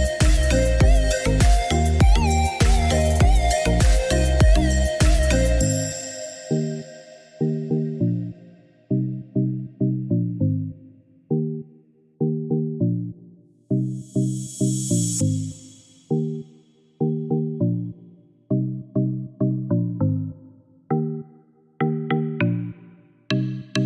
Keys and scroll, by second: 3.0 6, 3.6 8, 4.1 Return, 6.2 Escape, 13.2 Escape.